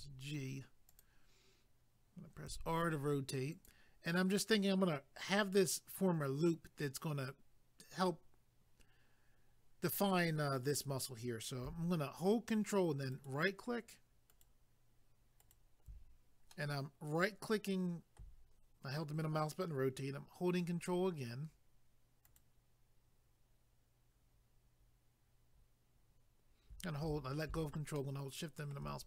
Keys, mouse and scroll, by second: 0.9 click, 2.4 r, 3.5 click, 13.1 ctrl+right click, 16.5 middle click, 20.6 ctrl+right click, 22.2 ctrl+right click, 28.0 shift+middle click.